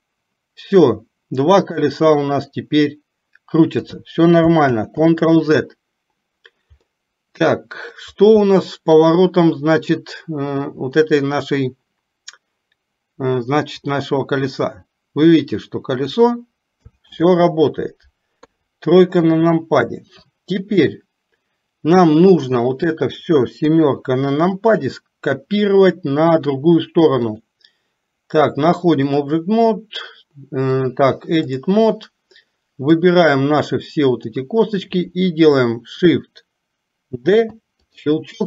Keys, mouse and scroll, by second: 7.0-8.0 middle drag, 8.5 middle click, 9.9 click, 14.0-16.3 drag, 18.5 KP_3, 20.9-22.6 middle drag, 23.8 KP_7, 27.4-29.4 drag, 30.9-31.9 drag, 33.3-34.4 drag.